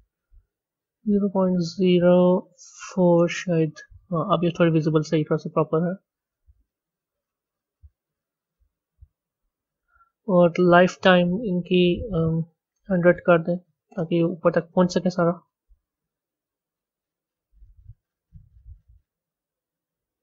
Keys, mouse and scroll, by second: 3.4 KP_0, 5.6 click, 9.7 click, 11.7-14.1 drag, 14.1 KP_0, 16.0-19.0 drag.